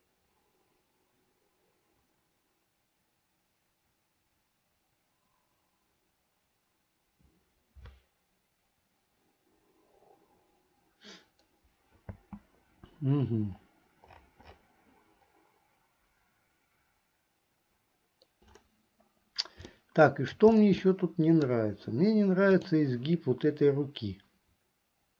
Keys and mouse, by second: 12.2 space, 19.8 shift+middle click, 21.0 middle click, 22.7 click.